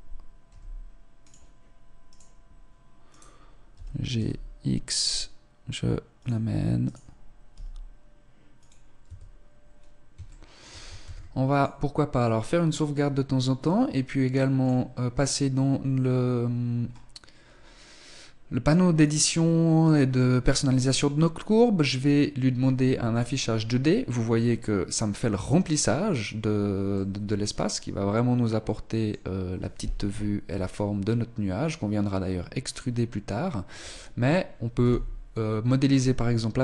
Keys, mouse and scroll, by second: 0.5 r, 1.9 right click, 3.1 right click, 3.7 g, 6.8 right click, 7.5 g, 9.1 Tab, 10.2 shift+middle click, 10.3 ctrl+s, 14.5 click, 16.1-17.7 scroll up 3, 19.0 click, 22.3 click, 26.9 middle click, 29.9 KP_1, 33.7 Tab, 34.4 z, 35.8 scroll up 1, 36.0-36.6 scroll down 2.